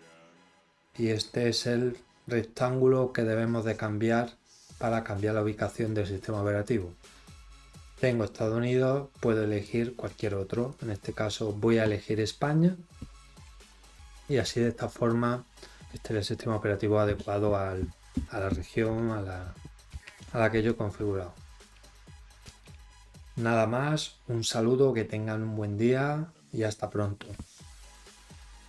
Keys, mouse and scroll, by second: 7.6 click, 9.6-10.7 drag.